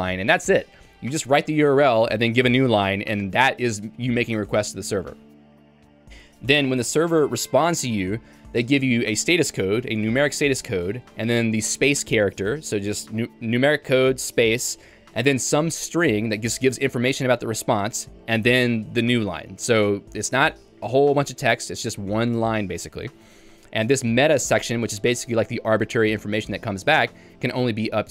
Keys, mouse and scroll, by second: 6.0 j, 7.9-9.2 typing, 11.1-16.5 l, 24.3 k, 24.8 h, 25.0 h.